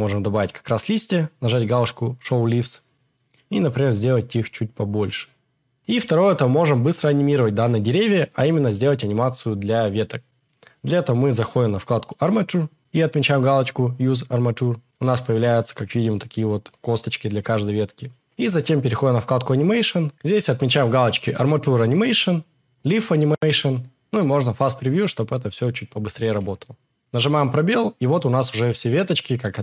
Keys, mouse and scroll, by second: 1.5 click, 4.9 click.